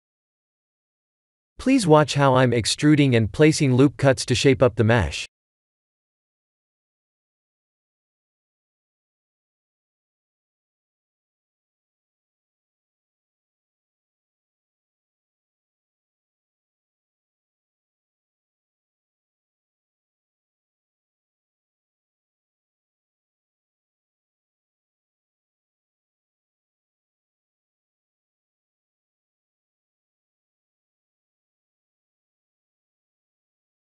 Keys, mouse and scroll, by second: 0.3 ctrl+r, 2.3 click, 3.0 ctrl+r, 5.6 ctrl+z, 7.3 click, 9.0 2, 9.7 3, 10.1 middle click, 10.8 click, 11.7 KP_3, 12.0 KP_1, 13.1 e, 14.2 s, 27.5 middle click, 28.8-30.1 scroll down 5, 29.5 middle click, 30.4 shift+z, 31.5 Tab, 32.0 click, 32.2 right click, 32.9 middle click.